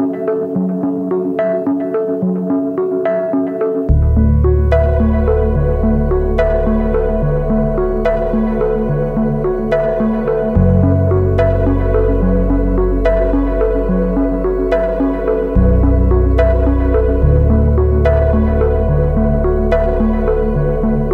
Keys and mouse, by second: 0.1 a, 1.9-5.3 shift+drag, 5.9 shift+click, 7.8-9.8 shift+drag, 10.3-14.8 shift+drag, 15.9-16.9 shift+drag, 17.1 Tab, 17.5 click, 18.4 Tab, 20.6 shift+click.